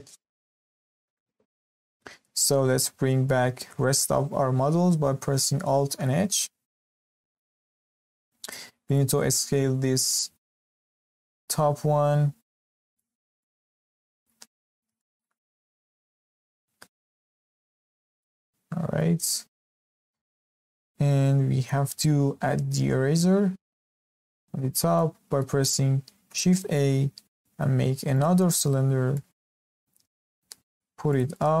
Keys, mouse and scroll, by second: 0.2-0.8 scroll down 5, 0.8 shift+middle drag, 1.1 Tab, 1.4 scroll up 1, 1.7-2.9 shift+middle drag, 2.9-3.2 scroll down 2, 3.2-5.9 shift+middle drag, 5.9 alt+h, 7.0-7.3 scroll down 2, 7.3-7.7 shift+middle drag, 7.7-8.0 scroll up 2, 8.0-8.4 shift+middle drag, 8.4 click, 8.8 click, 10.8 s, 13.2 scroll down 1, 13.4-14.4 middle drag, 14.4-14.9 scroll up 6, 14.9-15.3 shift+middle drag, 15.3-15.7 scroll up 2, 15.7-16.1 shift+middle drag, 16.1 scroll up 2, 16.3-16.8 shift+middle drag, 16.8 s, 18.4-18.9 scroll down 11, 18.9 scroll up 1, 19.0-20.8 middle drag, 20.8-21.2 scroll up 2, 21.2-21.6 scroll down 5, 21.6 scroll up 1, 21.6-24.3 middle drag, 24.3-24.6 scroll up 1, 24.6-24.9 scroll down 2, 24.9-26.5 shift+middle drag, 26.5 shift+a, 28.8-29.1 scroll up 2, 29.1-30.1 shift+middle drag, 30.1 g, 31.4 scroll up 1.